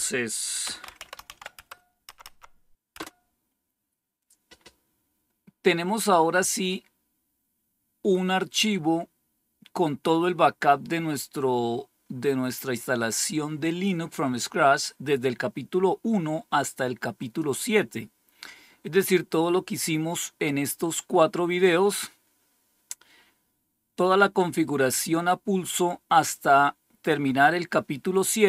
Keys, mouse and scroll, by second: 0.4-1.7 typing, 2.0 Up, 2.2 Up, 2.9 Return, 17.1 click, 22.1-22.5 scroll down 2, 23.1-26.4 scroll down 1.